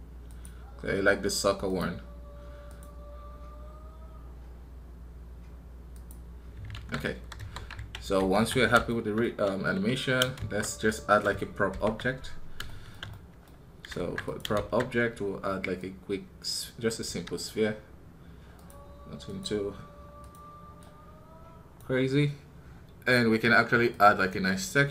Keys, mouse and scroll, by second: 7.3 KP_3, 8.8-13.9 shift+middle drag, 13.9 ctrl+Tab, 15.2-24.7 drag.